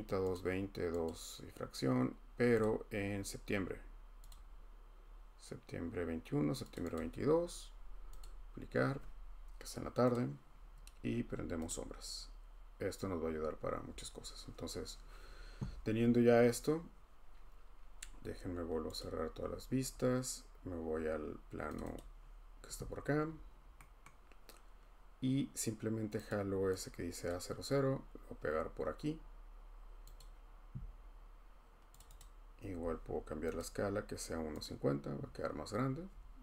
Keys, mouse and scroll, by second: 0.3 click, 1.1 click, 2.6 click, 3.0 typing, 4.3 click, 6.7 click, 6.9 click, 8.2 click, 10.1 click, 11.7 click, 19.0 click, 21.7 click, 21.9 click, 23.6-24.1 scroll down 3, 25.9 scroll, 26.3 click, 27.3 click, 27.3-27.6 scroll up 1, 30.2 click, 32.2-36.1 drag, 36.1 middle click.